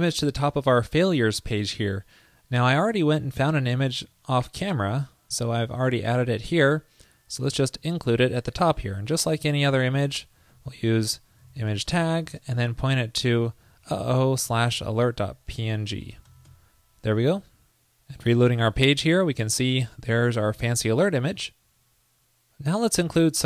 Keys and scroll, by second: 10.6 ctrl+shift+>, 16.1 super+Right, 16.4 super+s, 18.7 super+r.